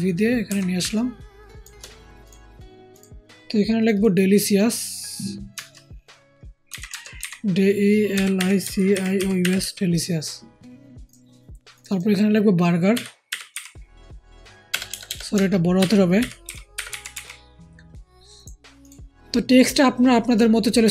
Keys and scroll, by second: 0.7 typing, 6.6-9.5 typing, 13.0 b, 13.2 u, 13.4 r, 14.6-16.4 typing.